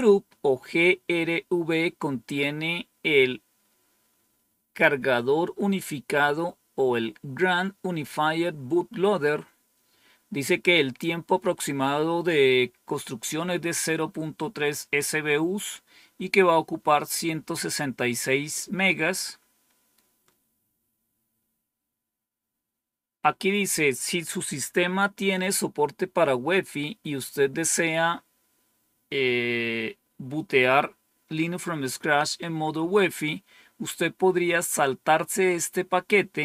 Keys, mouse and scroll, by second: 20.1-20.8 scroll down 1.